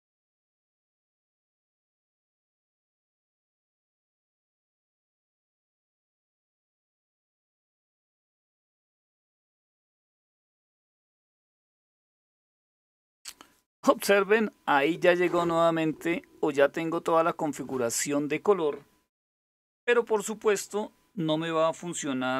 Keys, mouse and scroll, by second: 4.2 Return, 5.3-8.4 typing, 8.7 Return.